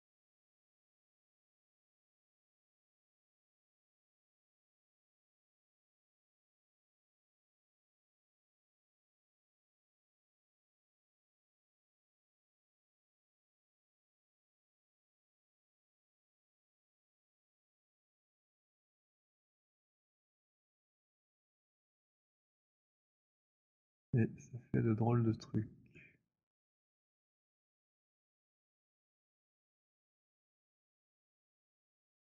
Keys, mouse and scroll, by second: 0.9-7.9 typing, 3.1 middle click, 7.9 middle click, 8.6 click, 14.6 click, 16.3 click, 17.8 click, 18.9 click, 21.0 click, 23.2 click, 28.5 click, 30.8 alt+click, 31.8 click.